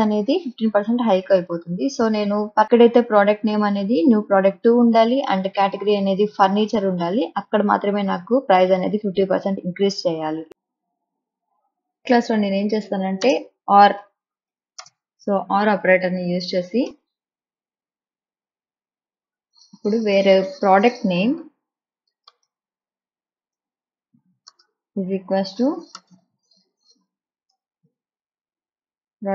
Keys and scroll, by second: 14.9 space, 24.9 n, 25.7 space, 27.6 shift+', 28.5 BackSpace.